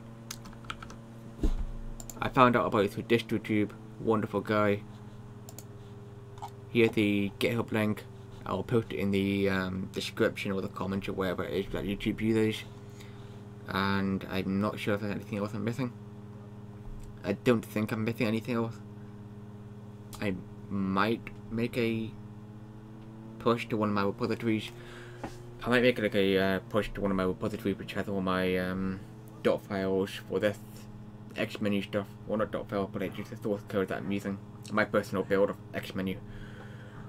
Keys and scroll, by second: 0.7 super+4.